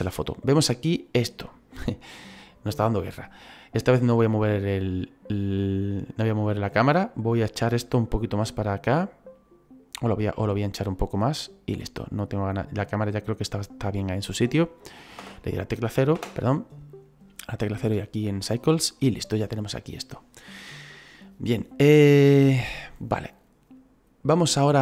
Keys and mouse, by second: 6.1 click, 7.9 right click, 9.9 click, 13.0 click, 15.1 KP_0, 17.7 click.